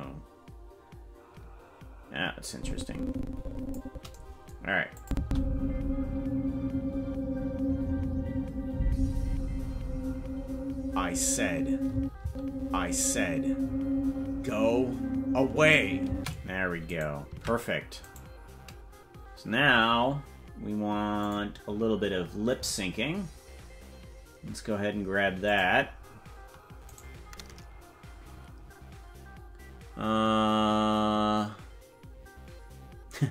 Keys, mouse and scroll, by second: 2.5-3.8 drag, 5.0-12.4 drag, 5.1 space, 11.9 space, 12.2 space, 16.1 space, 17.0 right click, 17.3 ctrl+Tab, 18.2 right click, 21.2 click, 25.5 click, 27.2 right click.